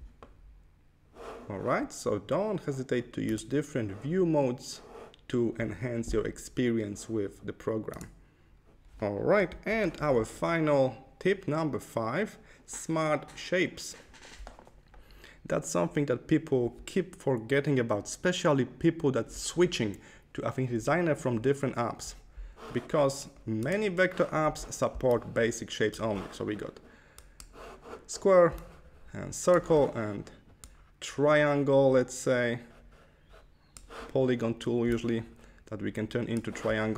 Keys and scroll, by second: 9.7 super+-.